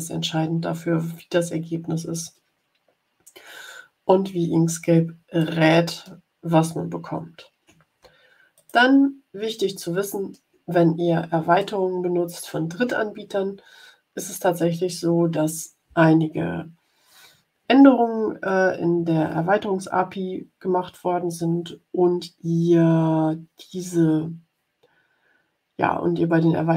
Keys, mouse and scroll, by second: 1.4-1.9 ctrl+scroll down 2, 4.4-4.7 ctrl+scroll down 2, 5.3 click, 6.0 middle click, 6.6-7.1 ctrl+scroll up 4, 8.5 click, 9.7 middle click, 10.3 ctrl+click, 10.6 ctrl+scroll up 2, 11.5-14.4 drag.